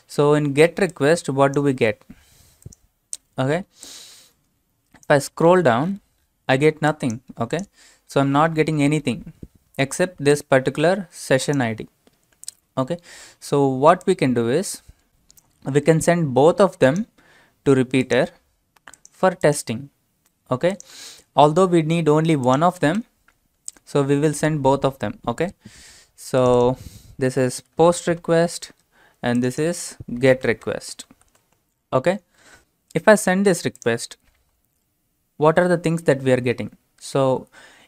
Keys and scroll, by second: 27.5-28.8 typing, 30.1-31.1 typing.